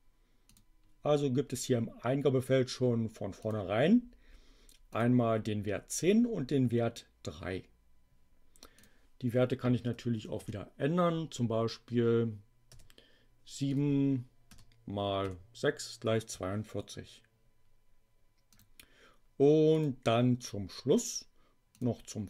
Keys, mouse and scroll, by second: 0.3 click, 3.4 click, 4.9 click, 8.8 click, 9.9 BackSpace, 12.6 7, 13.6 click, 14.5 BackSpace, 15.1 6, 18.5 click, 19.7 click, 21.7 click.